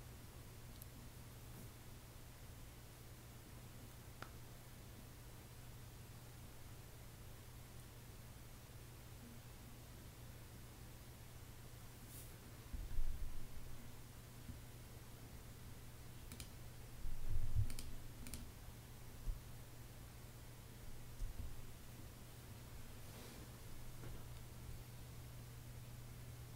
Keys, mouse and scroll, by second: 16.8 Escape, 18.8 space.